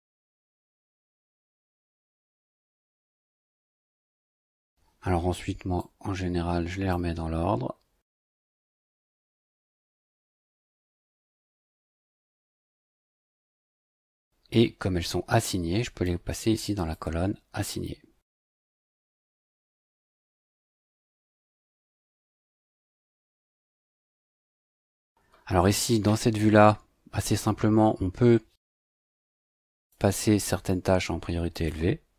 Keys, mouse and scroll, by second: 0.0-1.1 typing, 2.0 click, 3.3 click, 4.0 click, 5.8-7.1 drag, 8.6 click, 10.5 click, 11.9 click, 13.6 click, 16.0-17.1 drag, 17.6 click, 18.9 click, 20.2-21.4 drag, 21.9 click, 23.6 click, 29.7 click, 31.5 click.